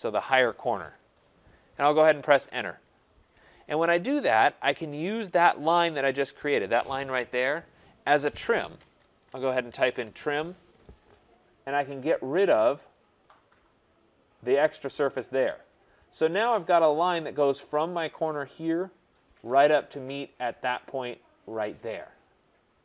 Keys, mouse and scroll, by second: 2.6 Return, 4.7 click, 5.9 click, 9.0-10.4 typing, 12.9 click, 14.3 click, 15.3 typing, 15.8 click, 16.3 scroll, 17.2-18.5 scroll, 18.5-19.5 scroll, 19.5-19.9 scroll.